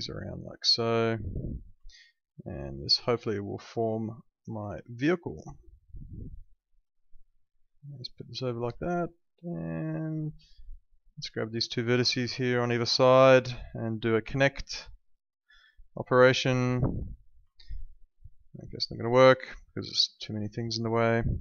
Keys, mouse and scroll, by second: 0.2 click, 1.9 alt+middle click, 4.9 alt+middle click, 6.1 alt+middle click, 7.8 click, 8.9 alt+middle click, 10.8 click, 11.5 alt+middle click, 12.9 alt+middle click, 14.7 click, 18.5 alt+middle click, 19.7 click.